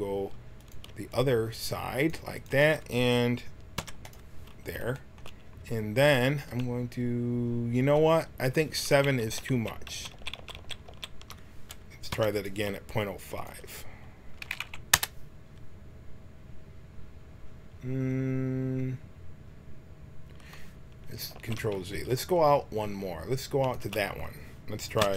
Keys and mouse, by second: 0.6-4.9 drag, 3.7 i, 6.4-8.9 drag, 8.9 ctrl+z, 9.2 ctrl+z, 9.5 ctrl+z, 9.8 ctrl+z, 10.1 ctrl+z, 10.3 ctrl+z, 10.5 ctrl+z, 10.8 ctrl+z, 12.1 i, 13.3-15.3 drag, 21.3 ctrl+z, 23.6-25.1 drag, 25.0 i.